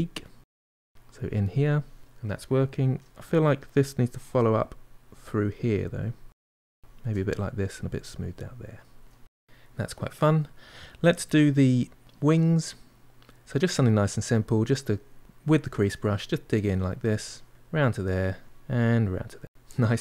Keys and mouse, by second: 1.1-3.7 middle drag, 3.7-7.6 ctrl+drag, 7.6-9.3 ctrl+middle drag, 10.2-13.1 shift+middle drag, 13.7-15.7 drag, 15.7 middle click, 16.2-19.3 drag, 19.5 middle click.